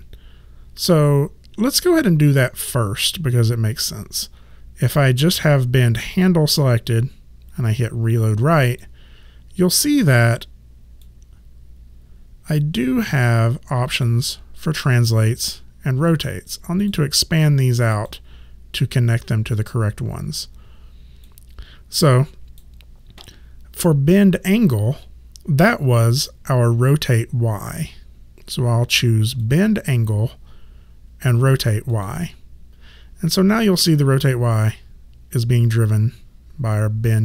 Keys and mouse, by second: 6.1 click, 8.7 click, 11.0 click, 16.8 click, 21.3 click, 29.4 click, 31.9 click.